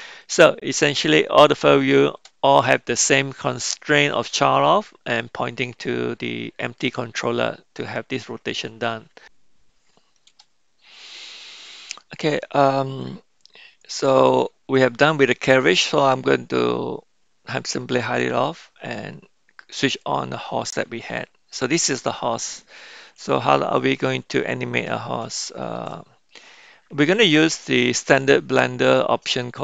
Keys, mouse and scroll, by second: 0.2-1.5 middle drag, 7.9-8.9 middle drag, 11.0-12.2 middle drag, 18.0 click, 19.9 click, 21.1-22.0 middle drag, 25.4-25.8 shift+middle drag, 26.5 middle click.